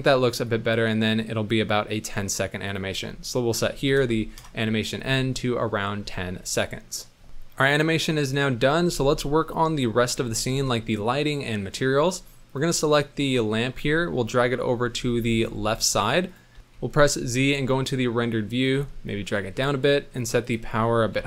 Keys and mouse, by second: 0.4 click, 2.7-4.4 drag, 6.5 middle click, 8.9 ctrl+s, 10.1 n, 12.5 click, 14.4 KP_7, 15.4 g, 16.7 z, 17.6-18.2 drag, 18.2 middle click, 18.7 g, 20.5-21.2 drag.